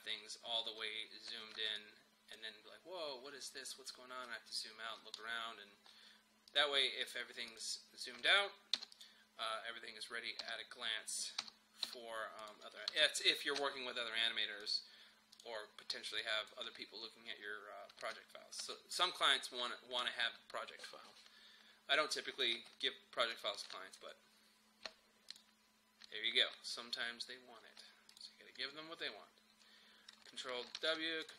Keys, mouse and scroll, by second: 0.2-1.3 scroll up 1, 1.3 space, 1.8-3.4 drag, 3.4-4.8 scroll down 1, 5.2-6.5 middle drag, 6.5 click, 8.8 ;, 9.0 click, 10.4-11.4 typing, 12.4 click, 12.9 ctrl+s, 14.6 click, 16.6 space, 22.6 space, 23.3 click, 28.1 click, 30.8 ctrl+w, 31.2 click.